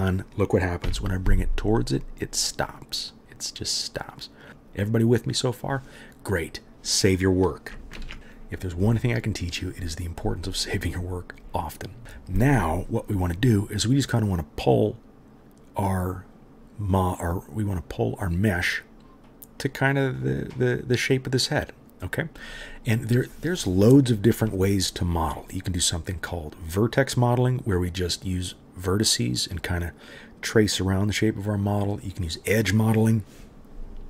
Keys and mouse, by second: 0.8 g, 4.5 click, 4.5 middle click, 5.1 click, 5.1 middle click, 8.0 ctrl+s, 8.2 right click, 32.3-34.0 right drag.